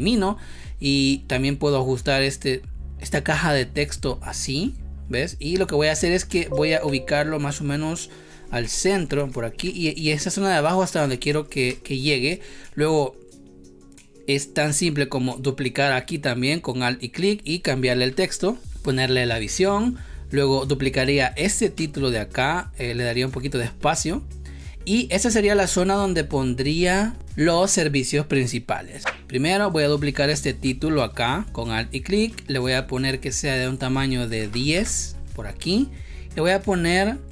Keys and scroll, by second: 6.2 space, 8.6 Left, 9.1 Down, 9.5 Left, 11.6 space, 18.0 t, 18.6 v, 25.5 space, 27.1 ctrl+Return, 34.0-34.8 typing, 37.2 ctrl+Return.